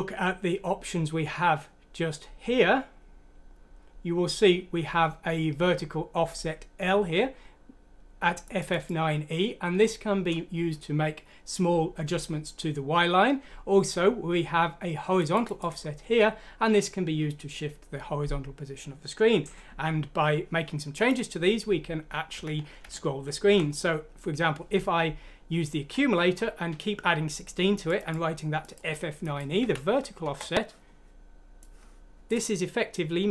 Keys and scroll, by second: 22.4 Down, 22.9 Home, 23.5 Delete, 29.6 F6, 30.2 Return.